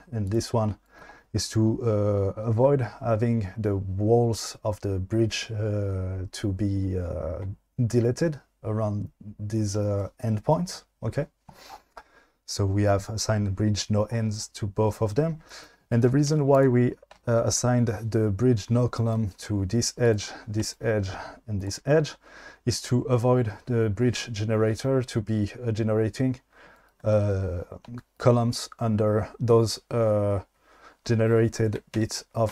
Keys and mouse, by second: 16.3 2, 16.6 click, 31.9 q.